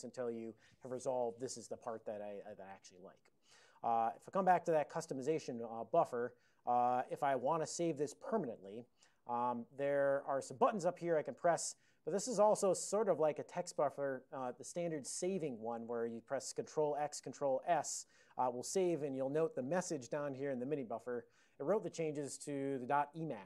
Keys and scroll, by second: 4.2 ctrl+x, 5.3 Return, 6.4 ctrl+n, 6.9 ctrl+n, 7.0 ctrl+n, 8.7 ctrl+p, 9.2 ctrl+p, 9.3 ctrl+p, 10.3 ctrl+e, 10.9 ctrl+b, 11.1 ctrl+b, 11.3 ctrl+b, 11.4 ctrl+b, 14.2 ctrl+n, 16.8 ctrl+x, 17.4 ctrl+s.